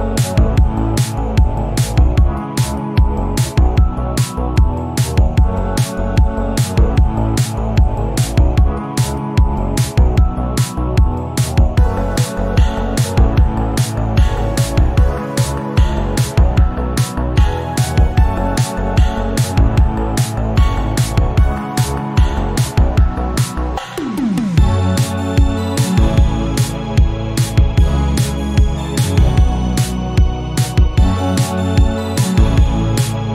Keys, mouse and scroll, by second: 2.9 middle click, 3.6 Tab, 4.4 alt+z, 5.2 scroll up 1, 5.4 scroll down 1, 5.6-6.9 middle drag, 12.2 click, 13.8-18.3 drag, 18.3 Tab, 19.0-26.3 drag, 26.4 click, 26.9 Tab, 27.1-27.7 scroll down 2, 27.7 click, 27.8 scroll up 2, 28.5 click, 31.6 click, 32.0-33.2 right drag, 33.2 click.